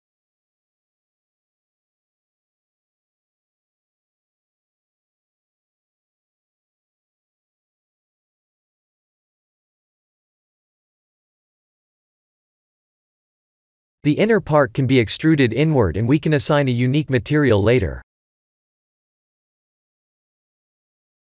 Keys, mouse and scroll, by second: 0.2 middle click, 2.0 KP_3, 2.8 middle click, 4.8 KP_1, 5.4 shift+z, 6.0 shift+middle click, 7.1 ctrl+r, 7.6 Tab, 8.1 Tab, 8.9 ctrl+r, 9.6 Tab, 10.9 Tab, 13.2 3, 13.4 click, 14.5 Tab, 14.8 3, 15.5 click, 17.5 i.